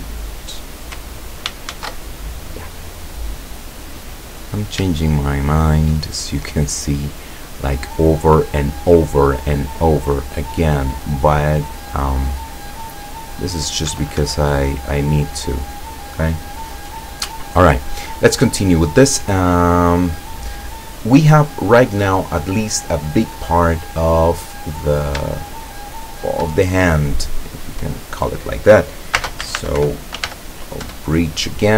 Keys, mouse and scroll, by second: 1.7 ctrl+shift+z, 2.5-3.4 scroll up 4, 3.9-4.9 drag, 5.1-6.1 shift+middle drag, 6.1-7.0 shift+middle drag, 7.3 scroll down 2, 8.1 middle click, 8.9 click, 10.2 click, 11.4 right click, 12.1 right click, 13.0 right click, 14.0 Escape, 15.4 click, 18.3-23.6 middle drag, 24.0 right click, 24.4-24.8 middle drag, 25.0 middle click, 25.8 shift+right click, 26.6-27.0 shift+scroll down 1, 27.1-28.4 middle drag, 29.2-30.3 typing, 30.8 Return.